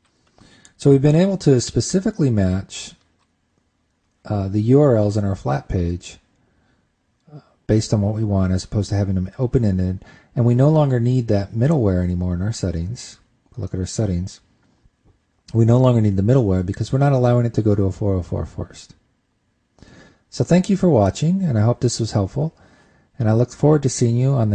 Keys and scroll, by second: 2.3 super+Tab.